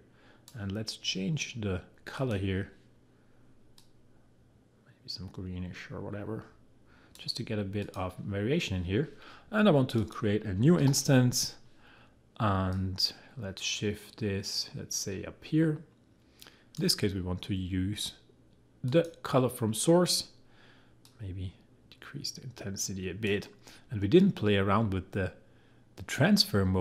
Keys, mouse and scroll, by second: 10.8 ctrl+d, 12.7-26.8 drag.